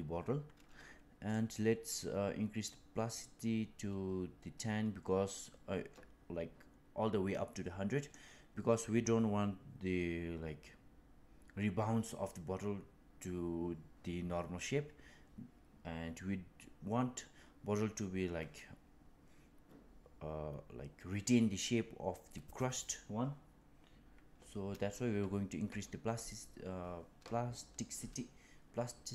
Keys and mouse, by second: 1.2-8.2 drag.